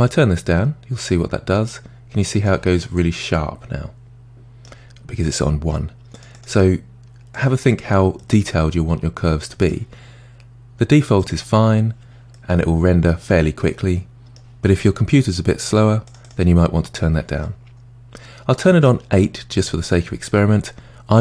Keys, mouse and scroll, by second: 0.1-2.8 drag, 2.8-5.8 middle drag, 6.1-7.8 drag, 8.2-11.2 middle drag, 11.2 click, 12.3-15.3 middle drag, 16.1 click, 17.4-20.4 middle drag.